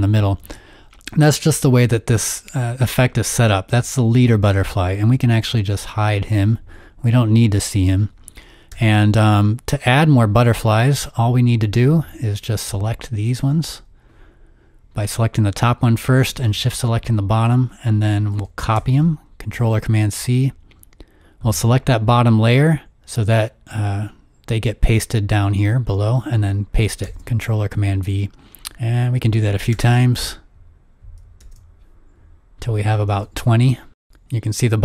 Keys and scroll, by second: 8.7 v, 18.8 super+c, 27.0 super+v, 28.0 super+v, 29.7 super+v, 30.3 super+v, 31.4 super+v, 33.4 super+v.